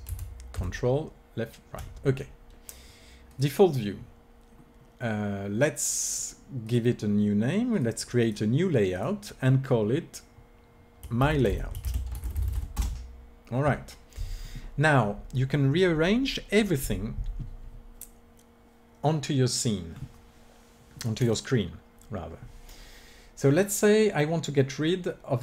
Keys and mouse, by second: 0.0 ctrl+Right, 0.4 ctrl+Left, 4.8 click, 6.5-12.7 drag.